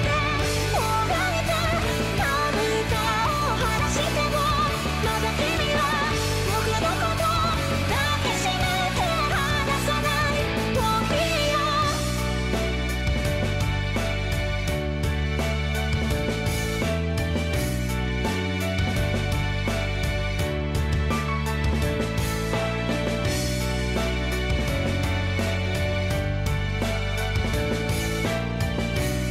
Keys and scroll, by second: 0.1 ctrl+z, 0.7 ctrl+z, 0.8 ctrl+z, 0.9 ctrl+z, 1.0 ctrl+z, 1.4 ctrl+z, 2.6 ctrl+z, 2.7 ctrl+z, 3.0 ctrl+z, 3.5 ctrl+z, 3.6 ctrl+z, 6.8 ctrl+z, 7.1 ctrl+z, 7.2 ctrl+z, 7.3 ctrl+z, 7.5 ctrl+z, 7.6 ctrl+z, 7.9 ctrl++, 8.2 ctrl+z, 8.4 ctrl+z, 8.9 ctrl+z, 9.8 ctrl+z, 10.0 ctrl+z, 10.7 ctrl+z, 11.1 ctrl+z, 11.2 ctrl+z, 11.4 ctrl+z, 11.5 ctrl+z, 11.8 ctrl+z, 11.9 ctrl+z, 12.0 ctrl+z, 12.5 ctrl+z, 12.6 ctrl+z, 12.7 ctrl+z, 13.3 ctrl+z, 13.5 ctrl+z, 13.7 ctrl+z, 14.2 ctrl+z, 15.3 ctrl+z, 16.8 ctrl+z, 17.6 ctrl+z, 17.7 ctrl+z, 17.8 ctrl+z, 18.1 ctrl+z, 18.2 ctrl+z, 18.4 ctrl+z, 18.5 ctrl+z, 18.7 ctrl+z, 18.8 ctrl+z, 18.9 ctrl+z, 19.2 ctrl+z, 19.9 ctrl+z, 20.0 ctrl+z, 20.1 ctrl+z, 20.2 ctrl+z, 20.6 ctrl+z, 20.9 ctrl+z, 21.1 ctrl+z.